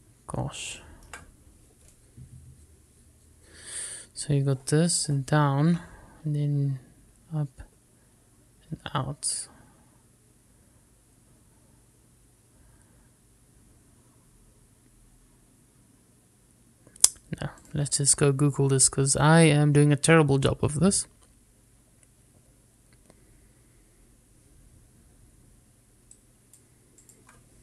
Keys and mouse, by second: 1.9 shift+middle click.